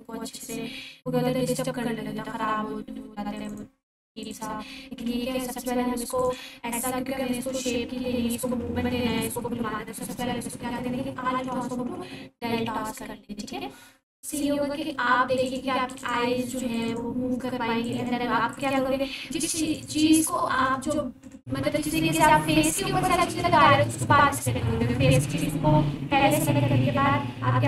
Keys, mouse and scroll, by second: 4.2 click, 4.7-5.6 typing, 6.1 click, 7.3 a, 8.9 ctrl+a, 14.2 click, 16.8 shift+click.